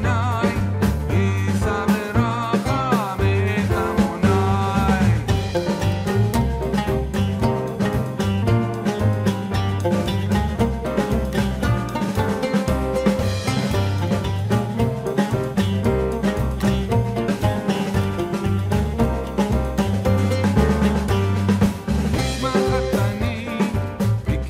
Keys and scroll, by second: 10.7 ctrl+i.